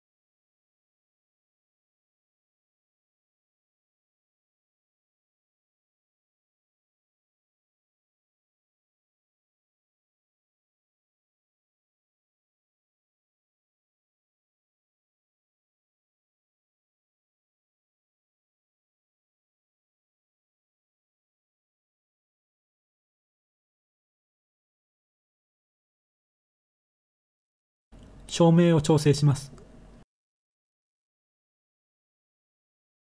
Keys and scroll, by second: 2.8-3.9 typing, 7.3-9.3 typing, 12.0 7, 13.7-14.0 typing, 16.3 1, 17.8 0, 25.1 7, 27.6-28.7 typing, 30.0-30.6 typing.